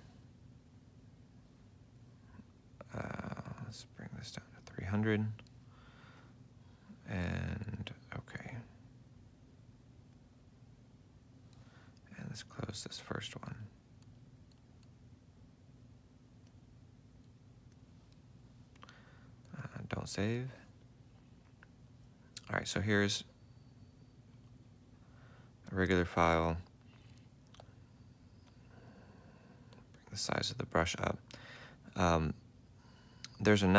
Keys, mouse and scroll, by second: 10.4 double click, 14.1 double click, 28.8 ctrl+alt+click.